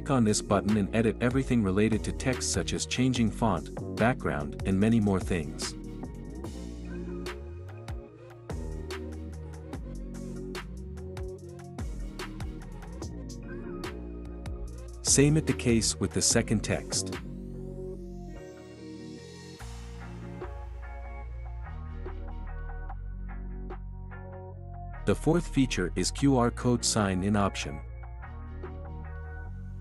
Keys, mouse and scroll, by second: 0.4-1.4 drag, 10.8-11.8 drag, 12.7-13.7 drag, 17.0-18.0 drag, 19.0-20.0 drag, 20.9-22.6 drag, 27.8 click.